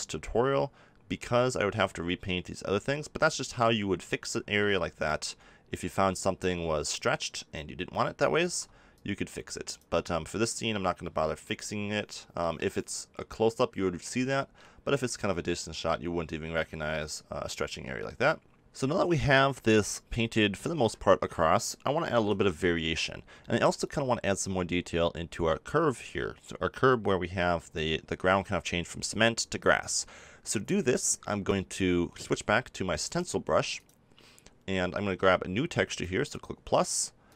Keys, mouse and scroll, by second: 0.7-3.2 middle drag, 3.8 middle click, 4.1 middle click, 8.4 ctrl+z, 8.9-10.6 drag, 12.6-14.4 middle drag, 16.6 middle click, 16.9-18.7 middle drag, 18.9 middle click, 19.2-22.0 middle drag, 22.0 KP_7, 22.6 middle click, 23.7 middle click, 25.2-33.0 middle drag, 35.9-37.3 drag.